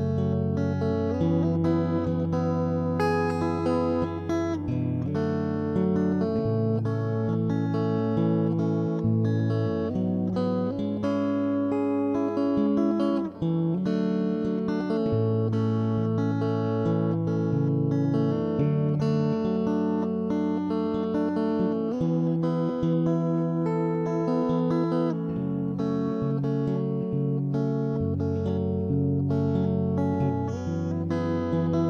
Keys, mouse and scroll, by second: 0.5 middle click, 0.9 s, 1.5-2.5 middle drag, 2.0 click, 2.5 x, 3.0 middle click, 3.7 middle click, 4.1 z, 4.3 ctrl+3, 4.5 middle click, 4.8 ctrl+3, 6.0 middle click, 6.7-7.8 typing, 7.0 ctrl+KP_3, 8.0-9.1 middle drag, 9.0 right click, 9.6 middle click, 9.9 ctrl+KP_3, 10.1 middle click, 10.4 s, 11.3 right click, 11.7 s, 12.4 right click, 12.5 click, 12.9 ctrl+KP_3, 13.2 s, 13.8 middle click, 14.2 right click, 14.8 ctrl+KP_3, 15.0 s, 15.8 click, 15.9 middle click, 16.9 ctrl+Tab, 17.1 z, 17.2-18.3 middle drag, 17.4 ctrl+KP_3, 17.9 right click, 18.4 middle click, 20.4 right click, 20.6 right click, 20.8 middle click, 21.2 middle click, 21.8 middle click, 21.8 x, 22.1 click, 22.1-23.4 right drag, 22.7 click, 23.2 click, 23.5 right click, 24.9 middle click, 25.3 x, 25.9 ctrl+s, 26.5 ctrl+Tab, 27.5 middle click, 27.7 click, 27.9 right click, 28.4 shift+r, 28.6 middle click, 28.8 shift+r, 29.2 middle click, 29.4 click, 29.6 right click, 29.9 middle click, 29.9 shift+r, 30.8 right click, 31.2 shift+r, 31.3-31.8 middle drag.